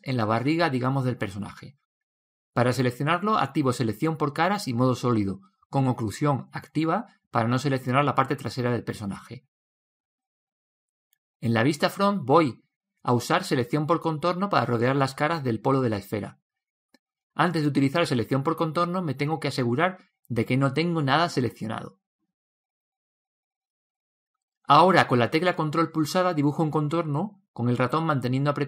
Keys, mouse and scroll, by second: 1.9-2.8 scroll up 1, 2.8 Tab, 2.8-3.1 scroll up 1, 3.1-4.8 middle drag, 5.9-7.9 middle drag, 7.0 Tab, 8.5 a, 12.1 KP_1, 13.2-15.5 middle drag, 15.7 click, 20.8 click, 25.6 ctrl+z, 26.9 click.